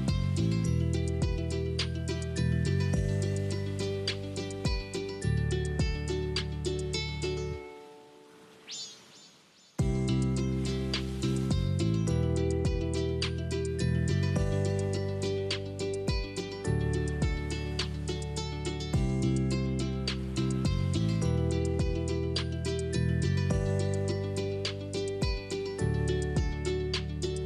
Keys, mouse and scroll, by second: 0.3 click, 0.6-3.1 middle drag, 3.1 shift+a, 4.5 click, 6.0 click, 6.8 click, 14.1 click, 15.8 click, 18.4 click, 20.2 click, 22.1 click, 23.4 click, 24.7 click, 25.6 click, 26.7 click.